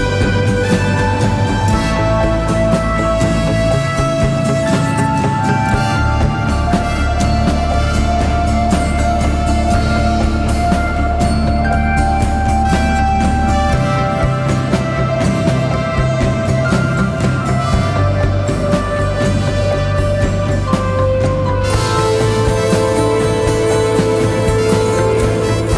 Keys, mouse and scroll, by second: 5.6 double click.